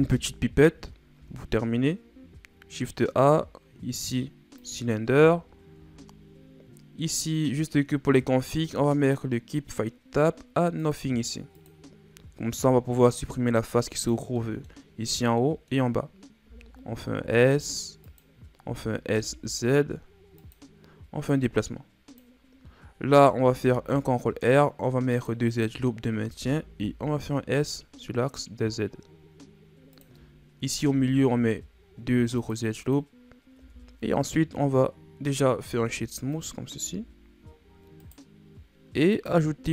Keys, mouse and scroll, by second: 1.1 shift+a, 5.4 shift+scroll up 5, 10.8-12.5 drag, 12.5 Tab, 13.1-14.3 drag, 14.3-16.4 middle drag, 16.4 s, 18.6 s, 21.2-22.6 drag, 22.6-23.4 scroll up 1, 23.4 ctrl+r, 26.3 s, 30.7 ctrl+r, 33.5 Tab, 35.7 w, 36.8 a, 38.0 right click, 39.1-39.7 drag.